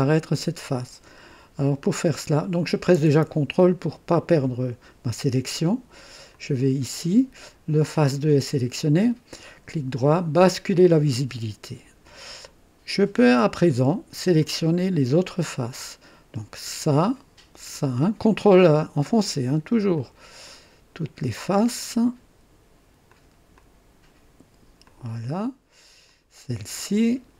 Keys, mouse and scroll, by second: 6.3 ctrl+click, 8.9 ctrl+right click, 10.4 ctrl+click, 14.4-16.0 drag, 16.6 click, 17.7 click, 18.7 ctrl+click, 19.9 ctrl+click, 20.4 ctrl+click, 23.1 ctrl+click, 23.5 ctrl+click, 24.8 ctrl+click, 26.1 ctrl+click, 26.8 ctrl+click.